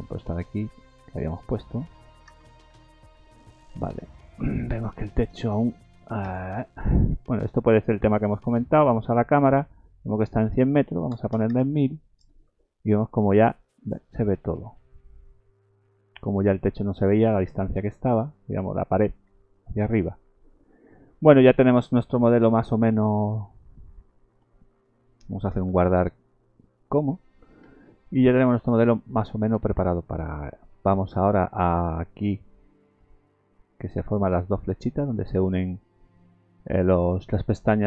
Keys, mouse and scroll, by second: 0.8 click, 2.3 KP_0, 3.7-5.3 scroll down 18, 4.2 middle click, 5.4 middle click, 6.2 KP_0, 9.1 click, 10.3 click, 11.5 KP_0, 14.8 scroll up 2, 15.4 shift+middle click, 17.3 shift+middle click, 17.8-18.3 scroll down 2, 18.3 shift+middle click, 20.0 scroll up 2, 20.4 shift+middle click, 24.3 shift+middle click, 25.7 ctrl+s, 27.9 shift+middle click, 30.1 shift+middle click.